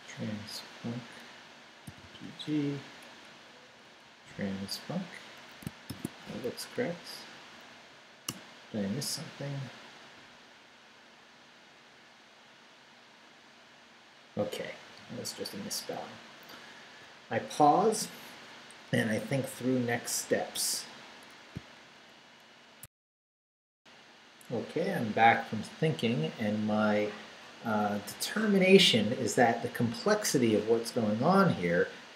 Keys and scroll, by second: 1.9 g, 3.0 Down, 4.0 Right, 5.9 shift+;, 6.4 shift+Up, 8.3 Return, 20.6 Return, 21.5 alt+shift+super+Return, 22.8 alt+shift+super+z.